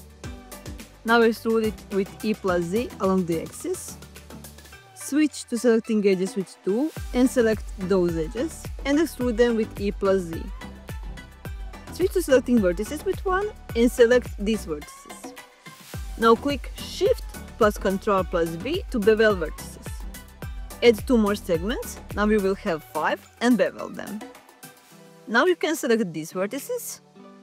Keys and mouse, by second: 1.3 e, 1.6 z, 3.2 click, 5.1 2, 5.9 click, 6.8 shift+click, 7.5 e, 7.8 z, 9.0 click, 9.6 middle click, 12.0 1, 15.0 shift+click, 16.8 ctrl+shift+b, 22.1 click, 25.9 click, 26.6 shift+click.